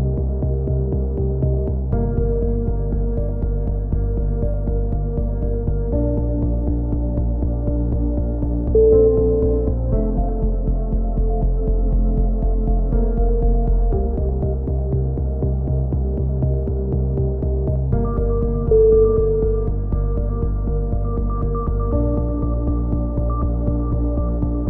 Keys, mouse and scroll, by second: 0.3 c, 2.0 right click, 2.6-4.3 drag, 4.3-5.8 middle drag, 5.5 a, 6.3 c, 7.6 click, 7.7 z, 8.3 z, 10.7 a, 10.8-12.3 middle drag, 11.0 z, 12.4 Tab, 15.2 click, 15.6 KP_3, 15.9 z, 19.3 Tab, 19.9 b, 22.1 x, 23.5 c, 24.4 x.